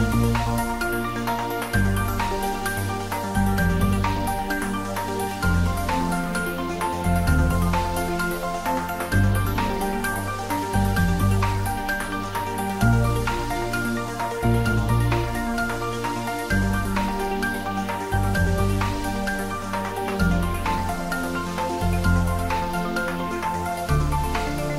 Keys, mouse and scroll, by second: 0.1 middle click, 0.9 shift+click, 1.6 ctrl+j, 3.9 middle click, 4.6 click, 8.4 middle click, 8.9 middle click, 9.5 shift+click, 10.7 ctrl+middle click, 11.3 s, 12.0 click, 12.3 ctrl+z, 12.7-14.6 ctrl+middle drag, 14.6 shift+click, 15.2 ctrl+z, 17.0 shift+click, 17.5 middle click, 18.3 click, 18.9 middle click, 19.5 click, 19.9 middle click, 20.8 shift+click, 21.8 ctrl+j, 22.9 click, 24.4 ctrl+middle click.